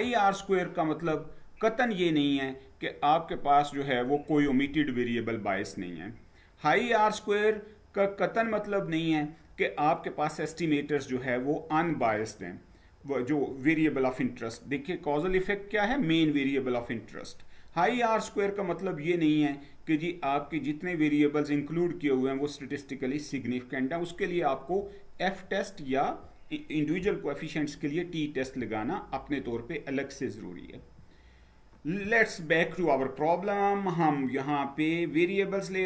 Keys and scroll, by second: 30.6 Down.